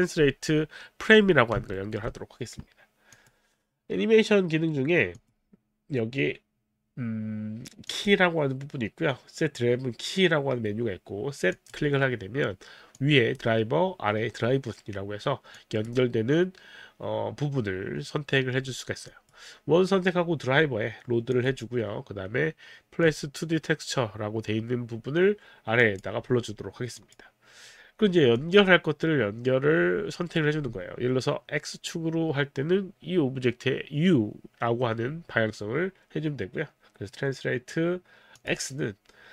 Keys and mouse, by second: 1.7 alt+middle click, 3.2 click, 5.1 click, 7.9 click, 11.5 click, 13.0 click, 15.5 click, 19.1 click, 21.3 click, 23.1 click, 25.8 click, 27.0 click, 28.3 click, 38.4 click.